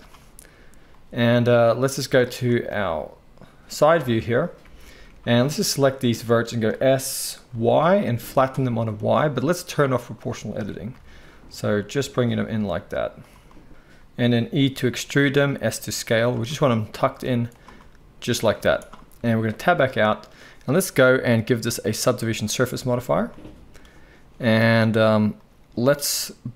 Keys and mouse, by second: 3.8 Tab, 4.6 alt+a, 5.3 alt+shift+click, 5.4-10.0 alt+shift+middle drag, 6.7 s, 10.0 click, 10.1-21.6 middle drag, 10.5 s, 13.7 KP_1, 14.6 e, 15.6 s, 17.2 z, 18.6 z, 19.5 Tab, 21.6-26.5 drag.